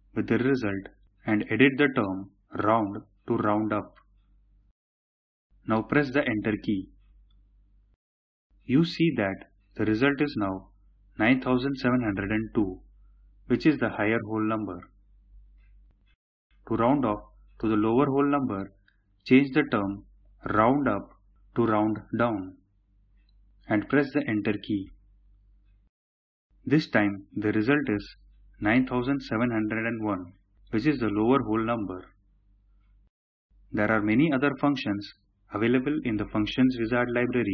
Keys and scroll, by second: 2.5-4.0 typing, 6.0 Return, 20.5 typing, 21.8-22.5 typing, 24.0 Return.